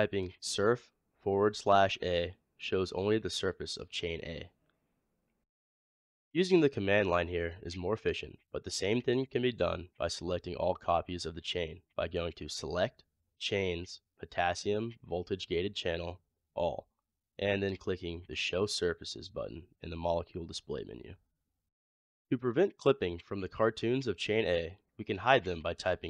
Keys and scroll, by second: 1.2 typing, 24.2-24.9 typing.